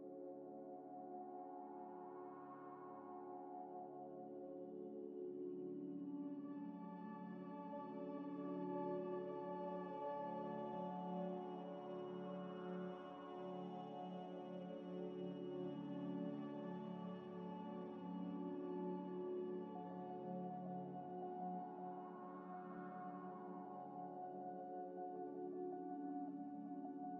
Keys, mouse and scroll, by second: 1.1-1.9 typing, 3.4 g, 3.5 z, 4.1 g, 4.2 x, 5.1 scroll up 1, 5.6 g, 5.7 y, 7.5 scroll down 1, 8.0 middle click, 8.4 right click, 9.1 ctrl+right click, 10.2 Delete, 10.6 scroll down 1, 10.7 middle click, 11.3 double click, 13.1 F3, 13.4-13.9 typing, 14.0 Return, 16.5 scroll up 1, 21.0 middle click, 21.8 scroll down 1, 22.0 middle click, 22.9 scroll down 1, 23.0 middle click, 23.6 F3, 23.8-24.7 typing.